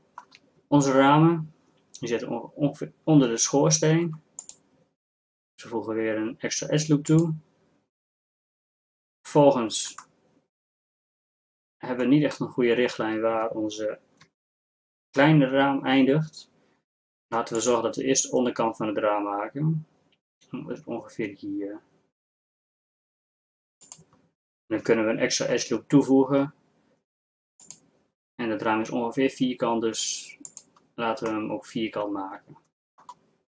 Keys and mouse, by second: 4.0 ctrl+r, 17.1 ctrl+r, 25.5 ctrl+r.